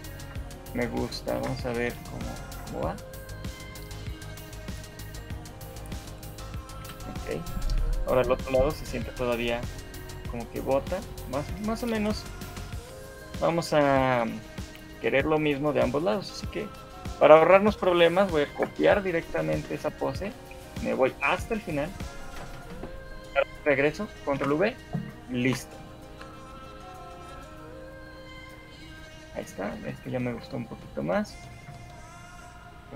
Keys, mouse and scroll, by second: 0.7 ctrl+c, 0.7 Left, 0.9 Left, 1.5 ctrl+v, 1.9 shift+Left, 2.5 alt+a, 6.9 Escape, 8.5 right click, 12.5 right click, 13.9 shift+middle click, 20.5 ctrl+c, 20.5 Right, 22.5 right click, 23.3 Left, 24.3 ctrl+v, 25.5 shift+Left, 25.9 alt+a, 28.9 Escape, 29.3 scroll up 2, 29.5 shift+middle click, 29.7 a, 30.3 shift+middle click, 30.5 middle click, 30.9 scroll up 1, 31.1 middle click, 31.7 alt+a, 32.3 scroll down 5.